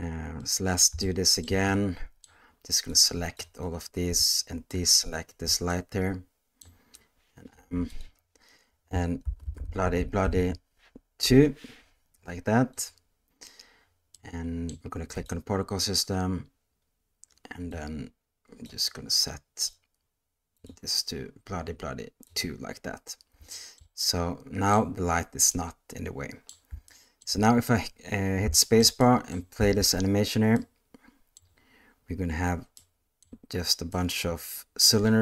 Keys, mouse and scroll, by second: 0.4-0.8 middle drag, 1.0-1.4 shift+middle drag, 1.7-2.2 middle drag, 2.9-3.4 drag, 4.7-5.0 ctrl+drag, 5.7-6.6 middle drag, 7.5 m, 14.1-14.7 middle drag, 15.2 click, 17.7 click, 20.5-22.4 drag, 23.5 shift+middle drag, 24.0-24.7 middle drag, 25.5-26.5 middle drag, 26.9-27.2 shift+middle drag, 28.5 shift+middle drag, 29.0 middle click, 29.6 space, 30.5-31.4 middle drag, 32.8-33.2 middle drag, 33.9-34.9 middle drag.